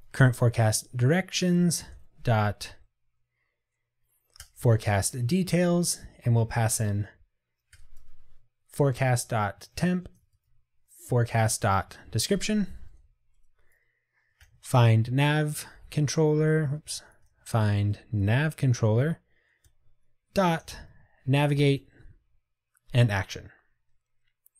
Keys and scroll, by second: 0.5 Return, 9.6 Return, 10.7 Tab.